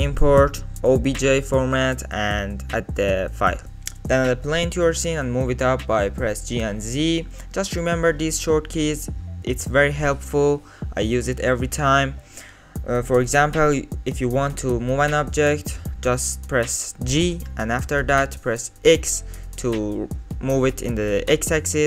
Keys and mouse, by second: 5.0 shift+a, 6.9 g, 9.8 middle click, 10.4 KP_Decimal, 11.5-11.9 middle drag, 14.3 middle click, 15.5 g.